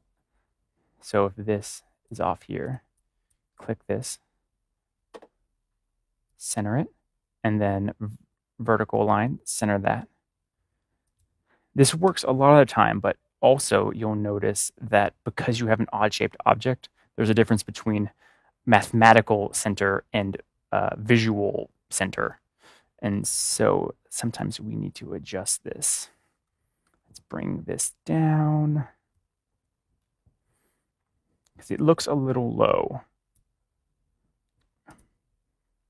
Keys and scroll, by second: 26.1 Down, 26.4 Down, 26.9 Down, 27.7 Down, 28.2 Down, 28.4 Down, 28.5 typing.